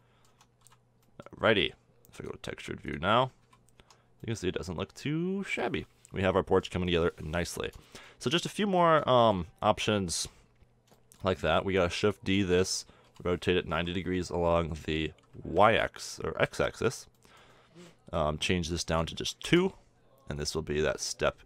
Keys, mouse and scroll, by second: 0.1 z, 0.7 Tab, 1.1 z, 2.6-3.9 drag, 3.9 a, 4.2 Tab, 11.8 middle click, 12.3 shift+d, 13.5 r, 17.6-19.4 middle drag, 19.4-21.4 drag.